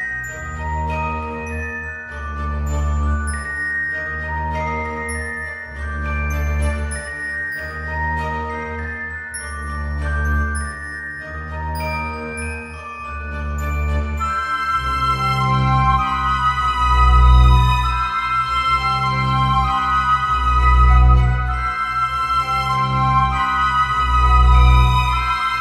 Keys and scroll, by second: 13.6 alt+x.